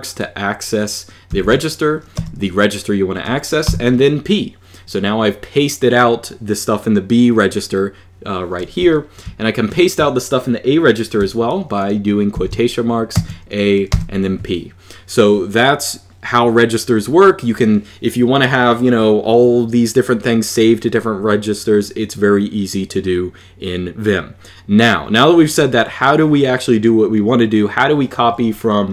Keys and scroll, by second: 1.1 shift+', 1.9 b, 3.4 p, 8.6 j, 12.1-13.9 typing.